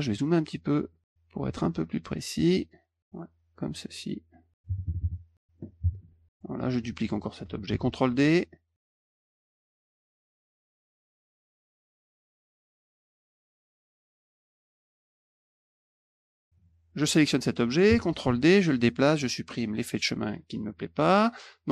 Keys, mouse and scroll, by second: 1.0-2.2 drag, 2.5 middle click, 3.7 click, 5.3 middle click, 6.6 click, 7.7 ctrl+d, 8.8 click, 9.4 click, 9.7 click, 10.3 click, 10.7 click, 11.1 click, 11.7 click, 12.5 click, 12.5 middle click, 12.8 ctrl+d, 13.1 click, 13.4 click, 13.9 click, 14.5 click, 14.8 click, 15.4 click, 15.6 middle click, 15.9 middle click, 16.2 click, 16.5 click, 17.0 click, 18.1 ctrl+d, 18.4 click, 19.9 click, 20.7 click.